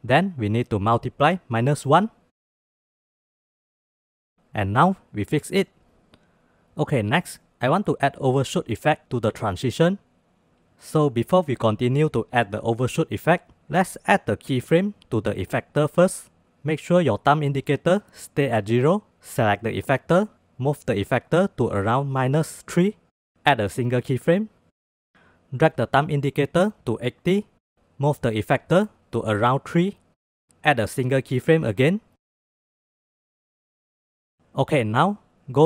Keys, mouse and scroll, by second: 1.7-3.3 drag, 3.6-5.5 drag, 5.7-6.0 shift+drag, 6.3-8.5 drag, 21.3-23.1 drag, 23.6 click, 25.7-27.7 drag, 28.8-30.5 drag, 30.5-31.6 middle drag, 32.6-34.3 drag, 34.8 click, 35.3-35.6 drag.